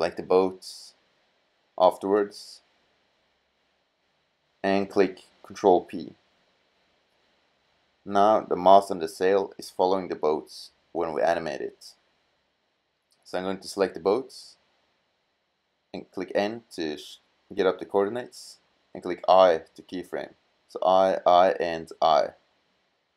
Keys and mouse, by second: 4.0 right click, 5.2 ctrl+p, 14.2 right click, 16.0 n, 19.1 i, 20.1 i, 20.7 i, 21.5 i, 23.0-23.1 drag.